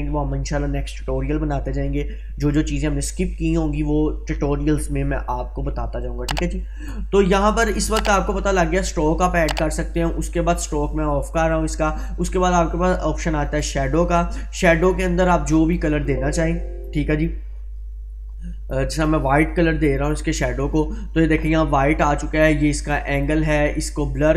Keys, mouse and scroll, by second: 7.8-8.7 drag, 15.7-17.5 drag, 22.7-23.4 drag.